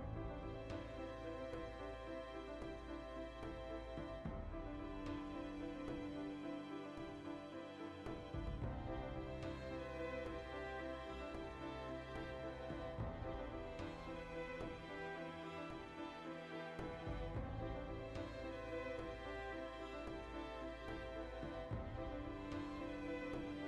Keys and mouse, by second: 0.7 ctrl+r, 3.1 ctrl+r, 5.0 right click, 5.1-6.5 middle drag, 5.8 ctrl+r, 6.5 right click, 7.4 ctrl+r, 7.7 right click, 8.1 click, 8.5 g, 8.8 right click, 9.3 click, 9.6 g, 10.0 right click, 10.2-11.7 middle drag, 11.7 click, 11.9 g, 12.3 right click, 12.7 click, 13.2 g, 13.4 right click, 13.6 g, 14.5 right click, 15.0 click, 15.3-18.4 shift+middle drag, 15.7 g, 17.0 shift+click, 18.4 click, 18.7 shift+middle click, 19.3 click, 19.6-23.3 shift+middle drag, 23.2 3, 23.3 right click.